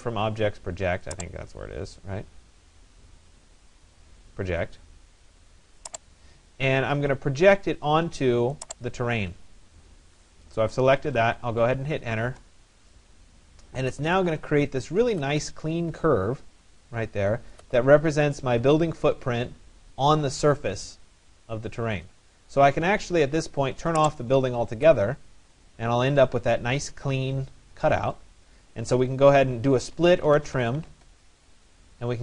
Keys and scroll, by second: 11.8 Return, 13.4 Return, 30.4 Return.